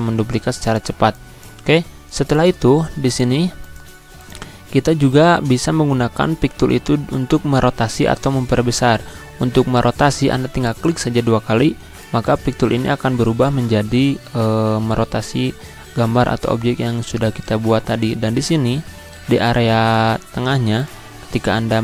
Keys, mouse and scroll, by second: 10.5-19.0 drag, 19.0-20.5 drag, 21.4 scroll down 1.